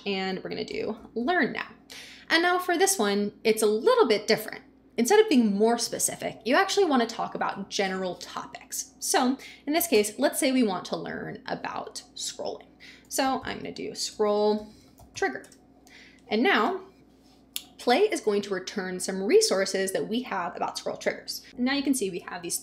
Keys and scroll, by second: 0.5-1.7 typing, 9.8 n, 9.9 space, 12.8-15.6 typing, 16.6 Return.